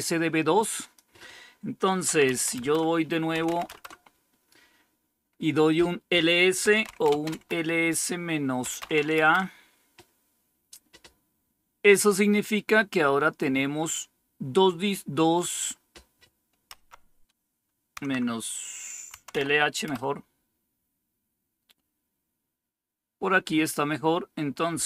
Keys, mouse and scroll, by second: 0.7 click, 1.8-3.8 typing, 6.3-9.2 typing, 16.6 Up, 17.9 Left, 19.0 Delete, 19.5 h, 19.8 Return.